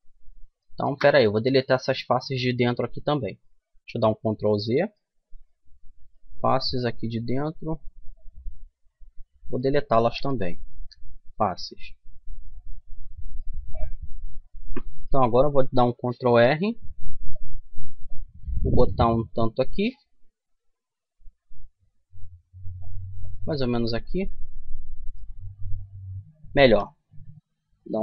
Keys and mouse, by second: 0.8-2.4 middle drag, 3.0-4.3 middle drag, 3.7 ctrl+z, 5.1-7.2 drag, 7.9-9.9 middle drag, 9.9 Delete, 11.3 middle click, 13.3 middle click, 14.1-15.6 middle drag, 15.6 ctrl+r, 23.7-26.3 middle drag, 26.3 ctrl+z, 27.5 ctrl+r.